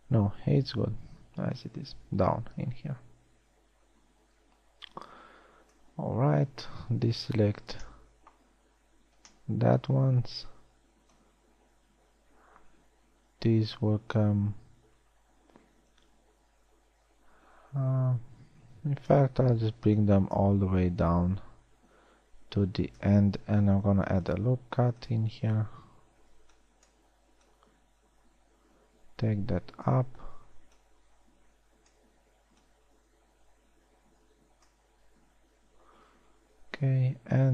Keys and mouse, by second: 7.9 b, 9.8 b, 20.3 a, 21.7 b, 24.3 ctrl+r, 26.7 a, 26.9 b, 31.1 a, 31.5 b, 36.9 a.